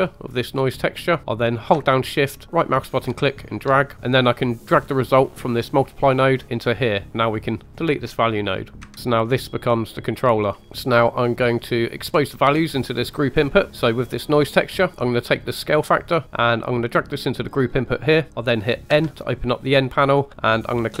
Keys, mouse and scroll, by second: 0.5-1.0 scroll down 1, 2.5-3.6 shift+right drag, 4.8 click, 7.2 click, 8.8 Delete, 8.9 scroll down 2, 9.1-10.1 drag, 10.6-11.0 scroll up 1, 10.6 n, 12.1 click, 13.7 click, 15.4 drag, 18.9 n.